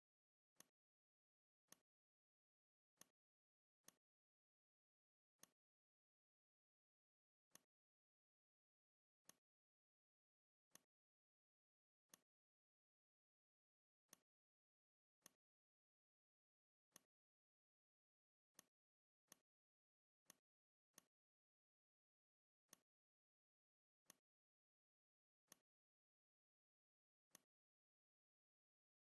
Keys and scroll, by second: 28.1 ctrl+z.